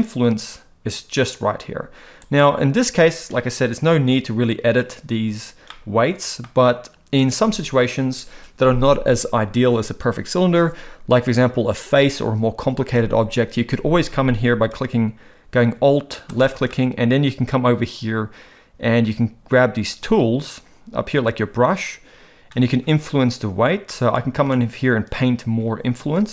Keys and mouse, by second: 5.7 middle click, 16.3 alt+click, 16.7 middle click, 23.9 middle click, 24.6-26.3 drag.